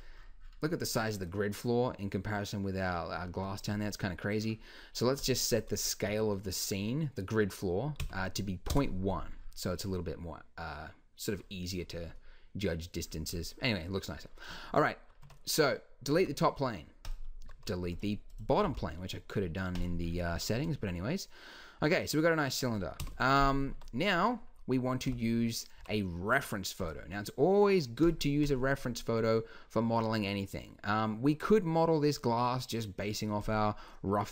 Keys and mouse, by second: 5.2-7.1 drag, 7.1-9.9 middle drag, 10.0 drag, 15.2 Tab, 16.1 x, 17.4 z, 18.6 x, 20.5 z, 23.0 KP_1, 23.8 Tab, 25.1 n, 25.8 n, 33.4-34.3 drag.